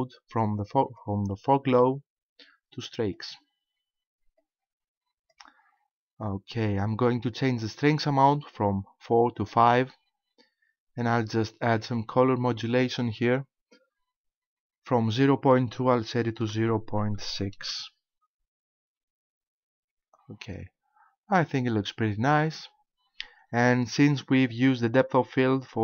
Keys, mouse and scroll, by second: 0.8 click, 4.4 click, 9.4 click, 12.9 click.